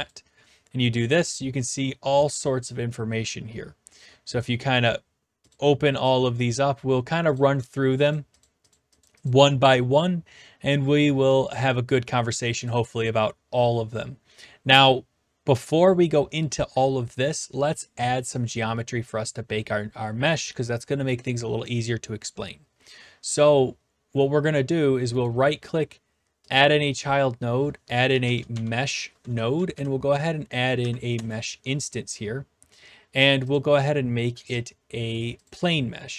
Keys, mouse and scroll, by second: 1.1 click, 4.4 click, 5.5 click, 6.1 click, 7.3 click, 8.0-9.1 scroll up 5, 9.1-10.3 drag, 11.0-12.2 drag, 12.6-13.7 drag, 25.3-26.3 right drag, 26.5-27.5 drag, 27.8-29.0 typing, 29.5 Down, 29.7 Down, 31.1 shift+Return, 33.5 click, 34.5 click, 35.5-36.1 drag.